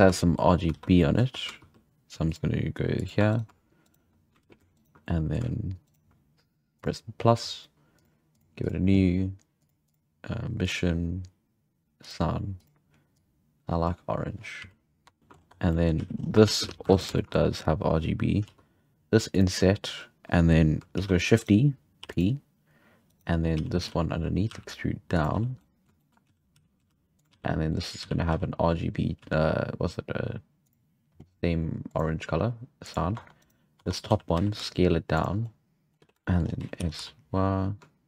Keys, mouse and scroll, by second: 0.2 shift+middle click, 0.4 scroll up 5, 0.7 alt+a, 0.8 scroll down 1, 1.0 middle click, 1.6 ctrl+r, 3.2 3, 3.3-4.4 right drag, 4.4 ctrl+z, 4.7 shift+right click, 5.0 middle click, 5.8-6.8 shift+right drag, 6.8-8.4 drag, 8.6-9.7 drag, 9.8-12.6 drag, 13.2 click, 14.6 z, 14.7 z, 15.0 Tab, 15.1 scroll down 2, 15.2 shift+middle click, 15.3 scroll up 1, 15.5 Tab, 15.6 scroll down 1, 15.7 middle click, 16.0 z, 16.2 scroll up 1, 16.4 alt+a, 16.6 z, 16.8 3, 17.0 right drag, 17.2 shift+middle drag, 17.5-18.2 scroll up 1, 18.2 scroll up 1, 18.4 i, 21.0 shift+d, 22.0 p, 23.1-23.6 right drag, 23.6 z, 23.8 z, 24.3 scroll up 1, 24.5 e, 25.6 middle click, 26.3-29.2 typing, 27.7 middle click, 30.6-33.1 drag, 33.1 Tab, 33.4 right click, 33.8 Tab, 34.1 a, 34.4 s, 35.4 scroll down 2, 35.5 middle click, 35.9-36.6 scroll up 5, 36.1 z, 36.2 shift+middle click, 36.6 s.